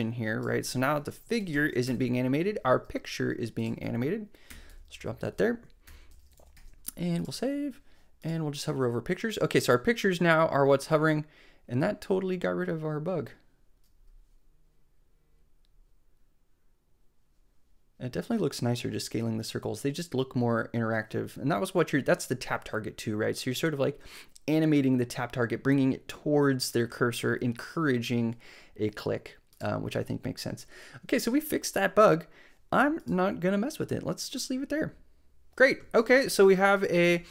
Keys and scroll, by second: 0.5 super+x, 1.4 shift+super+Down, 1.8 shift+BackSpace, 2.8 BackSpace, 4.5 Return, 4.7 super+v, 5.8 super+], 6.2 super+Up, 6.5 super+s.